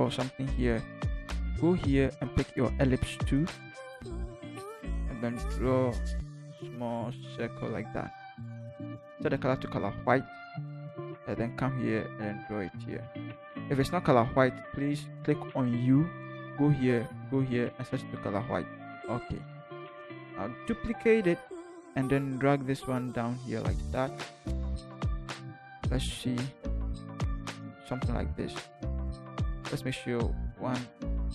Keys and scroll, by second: 0.5 typing, 20.6 ctrl+j, 21.3 ctrl+v, 22.1 ctrl+shift+v, 22.2 ctrl+shift+Down, 22.7 ctrl+shift+Down, 26.4 ctrl+Down, 27.1 ctrl+Down, 30.8 Down, 31.2 Up.